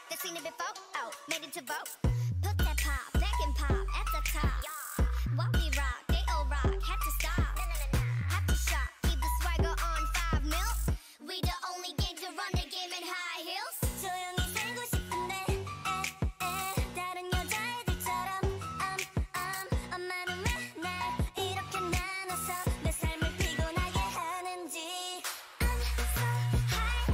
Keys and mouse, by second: 0.6-1.8 middle drag, 0.9 Tab, 5.3 Tab, 6.3-8.5 drag, 6.9 g, 9.3-11.2 drag, 9.6 g, 10.5 s, 11.5 click, 11.9 s, 12.9 s, 13.9-16.4 middle drag, 14.4 s, 15.5 s, 18.7-20.0 middle drag, 21.1 s, 22.0 a, 22.3-24.1 drag, 22.6 s, 24.2 click, 24.4 s, 25.4 Tab.